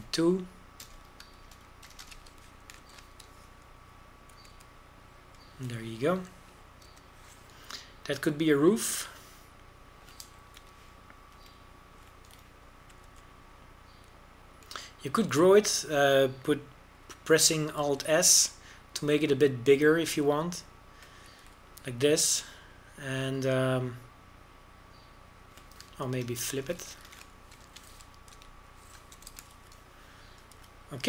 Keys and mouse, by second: 3.4 ctrl+KP_Add, 3.6 ctrl+KP_Add, 3.9 ctrl+KP_Add, 4.1 ctrl+KP_Add, 4.9 ctrl+n, 6.4 a, 6.6 z, 9.0 l, 12.7 KP_7, 13.4 KP_5, 15.1 alt+s, 19.9 alt+s, 23.5 a, 28.2-28.9 ctrl+KP_Add, 29.7 ctrl+m.